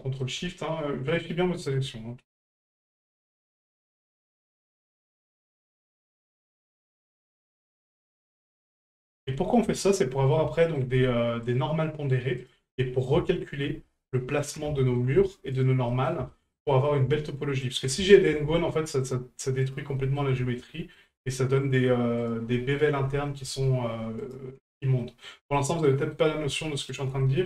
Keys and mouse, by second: 1.1 ctrl+right click, 1.4 middle drag, 2.4 ctrl+right click, 2.7 middle click, 3.2 shift+middle click, 4.0 ctrl+right click, 4.4 middle click, 5.1 middle drag, 5.5 shift+middle drag, 6.5 ctrl+right click, 7.4 ctrl+right click, 8.0 ctrl+right click, 8.4 middle click, 9.0 shift+middle drag, 9.3 middle drag, 9.8 shift+middle drag, 10.1 middle drag, 10.6 shift+middle drag, 11.4 ctrl+right click, 12.4 ctrl+right click, 12.8 middle drag, 13.3 shift+middle drag, 14.4 ctrl+right click, 14.8 shift+middle drag, 15.5 ctrl+right click, 15.9 middle drag, 16.3 shift+middle drag, 16.7 middle drag, 17.6 ctrl+right click, 18.1 shift+middle drag, 19.0 ctrl+right click, 19.6 ctrl+right click, 20.0 middle drag, 20.4 shift+middle drag, 20.7 middle drag, 21.6 ctrl+right click, 22.2 ctrl+right click, 22.5 middle drag, 23.1 shift+middle drag, 24.2 ctrl+right click, 25.0 middle drag, 25.5 shift+middle drag, 26.0 shift+middle drag, 26.9 ctrl+right click, 27.2 middle drag.